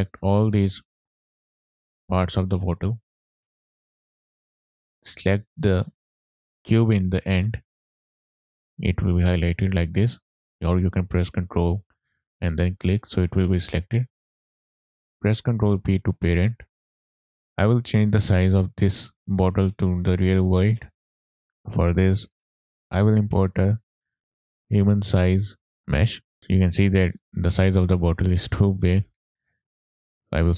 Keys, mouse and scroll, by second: 0.7 shift+click, 1.6-1.9 middle drag, 2.8-3.2 middle drag, 3.6 click, 4.5-5.1 shift+middle drag, 10.2 ctrl+click, 11.8 ctrl+click, 15.5 ctrl+p, 16.9 right click, 16.9 click, 17.3-17.7 shift+middle drag, 22.3-26.3 drag, 26.7 shift+middle click, 26.7 scroll down 1, 27.3 shift+middle click, 29.0-29.7 drag, 30.2 shift+click.